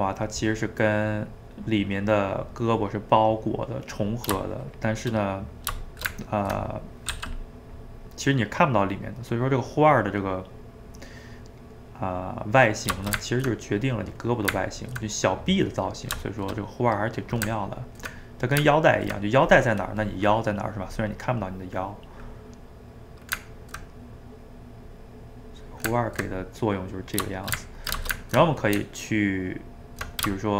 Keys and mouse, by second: 0.1 middle click, 0.5 click, 1.1-4.4 middle drag, 4.4 shift+click, 5.3 middle click, 5.9 shift+right click, 6.1 ctrl+middle click, 7.1 f, 7.5 middle click, 8.0 click, 8.8 middle click, 9.4-10.6 drag, 10.6-24.9 middle drag, 24.9 click, 25.7-27.3 ctrl+middle drag, 27.3 shift+right click, 27.6-28.8 ctrl+middle drag, 28.8 Tab, 30.4 shift+middle click.